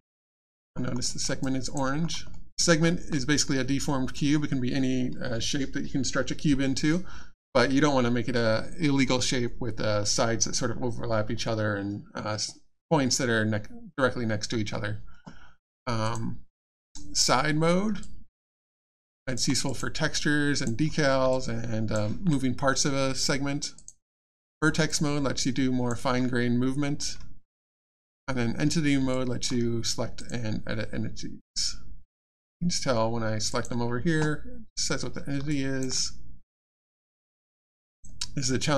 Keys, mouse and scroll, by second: 0.1 alt+click, 0.7-1.0 alt+scroll up 1, 1.0 alt+middle click, 1.4 alt+click, 2.0 alt+scroll up 1, 2.3 alt+middle click, 2.8 alt+scroll up 1, 16.0 click, 18.0 alt+click, 19.1 alt+click, 19.7 click, 19.7 click, 21.3 alt+click, 23.7 click, 24.9 alt+click, 28.1 click, 29.1 alt+click, 30.2 click, 31.4 click, 35.5 alt+click, 36.8 click, 37.9 click, 38.6 alt+click.